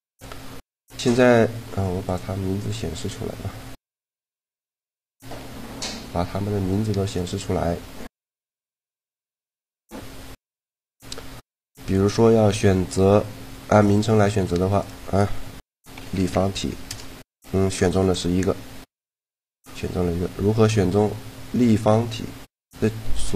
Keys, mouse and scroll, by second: 1.0-2.7 right drag, 2.0-3.7 drag, 2.6 middle click, 2.9 right click, 4.7-6.5 drag, 5.1 a, 5.3 a, 7.0-8.6 right drag, 9.0 a, 9.3-10.8 middle drag, 10.8-12.5 right drag, 11.7 a, 13.7 click.